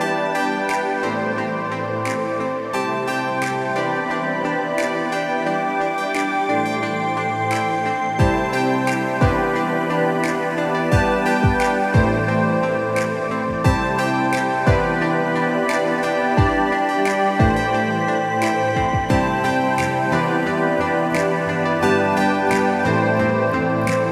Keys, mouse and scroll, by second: 0.5 ctrl+t, 2.0 ctrl+alt+q, 2.6 Tab, 3.7 shift+click, 6.1 Return, 6.8-9.7 ctrl+drag, 10.1 ctrl+alt+q, 11.0 Tab, 12.2 shift+click, 15.7 Return, 16.4-18.1 ctrl+drag, 18.4 ctrl+alt+q, 19.8 Tab, 20.0 shift+click.